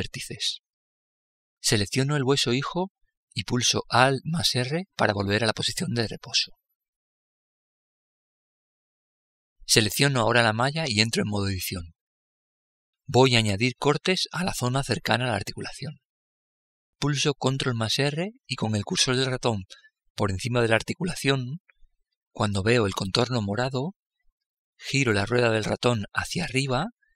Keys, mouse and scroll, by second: 4.3 alt+r, 9.7-11.4 right drag, 11.2 Tab, 16.8 ctrl+r.